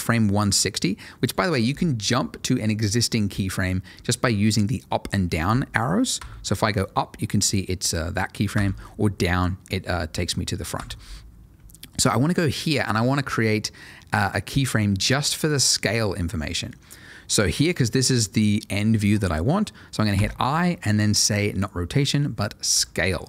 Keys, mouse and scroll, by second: 6.1 Up, 8.5 Down, 10.7 Up, 20.1 i, 22.7 click.